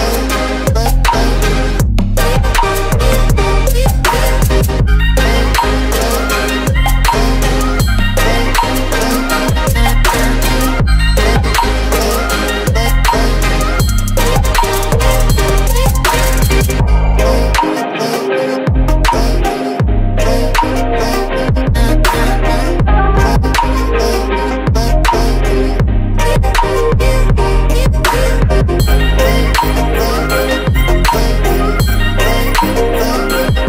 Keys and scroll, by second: 3.2 Right, 5.4 Right, 12.7 Up, 13.9 Left, 17.7 Left, 22.9-24.9 typing, 27.6 ctrl+a, 28.8-31.0 typing.